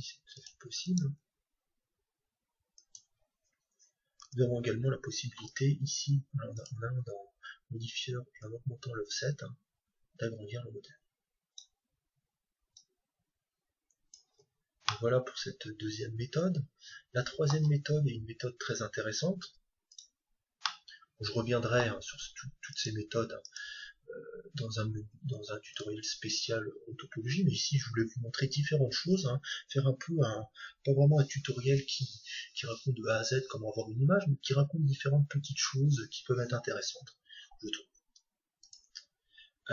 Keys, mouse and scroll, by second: 1.1 g, 2.9-4.9 drag, 4.2 Tab, 6.5-10.2 drag, 12.7-14.6 drag, 14.9-16.7 middle drag, 20.6-22.5 middle drag, 22.7-38.6 right drag, 38.6-39.7 drag.